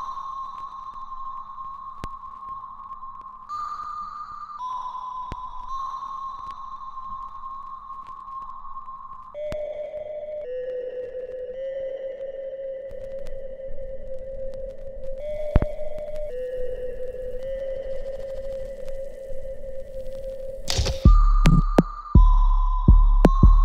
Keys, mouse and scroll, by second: 1.3 alt+right click, 1.8-5.3 alt+drag, 5.3 alt+right click, 5.8 alt+click, 6.3 alt+middle click, 6.6 alt+right click, 7.7 ctrl+s, 8.1 right click, 9.0 click, 9.6 shift+click, 10.6 click, 12.2 alt+right click, 13.0-14.8 alt+drag, 14.8-16.4 alt+right drag, 16.4 click, 18.1-20.8 ctrl+drag, 20.8-23.6 ctrl+drag.